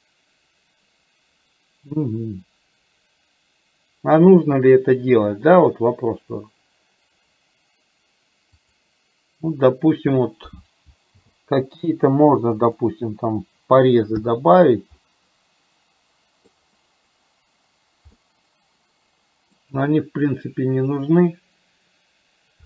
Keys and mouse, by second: 8.7 click, 15.1-16.6 middle drag, 18.3-19.7 middle drag.